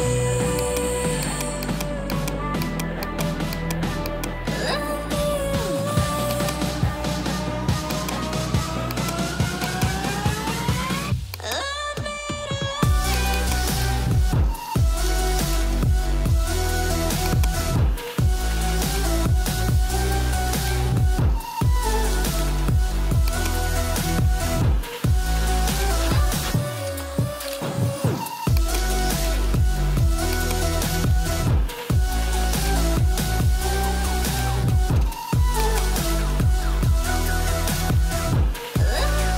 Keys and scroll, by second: 7.1 Delete, 14.1-15.9 typing, 34.1 0.